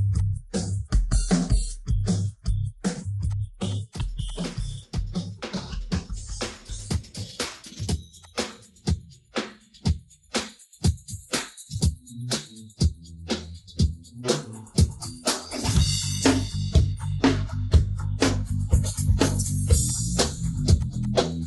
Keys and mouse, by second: 0.1 click, 0.5-1.5 middle drag, 3.2 click, 3.7 click, 3.9 click, 4.2 click, 4.6 middle click, 5.9 click, 6.2 middle click, 6.9-7.5 drag, 12.0-13.6 drag, 16.8-17.1 middle drag, 17.5-18.1 middle drag, 19.9 click, 21.3 middle drag.